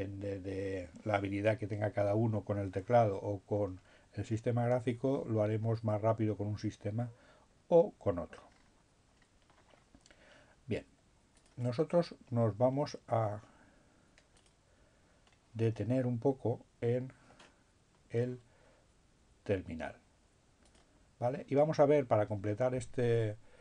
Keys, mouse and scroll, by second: 3.7-4.4 scroll down 1, 4.4-5.6 scroll up 1, 5.6-6.4 scroll down 1, 8.6-9.8 scroll up 1, 11.2 click, 13.2-15.0 drag, 20.8 click.